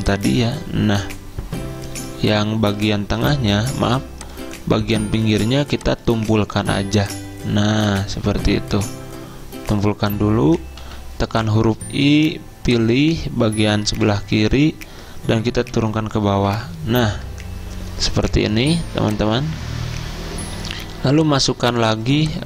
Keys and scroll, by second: 1.3 z, 3.3 a, 10.9 i, 14.0 v, 15.8 ctrl+[, 16.6 ctrl+[, 21.0 z, 22.2 m.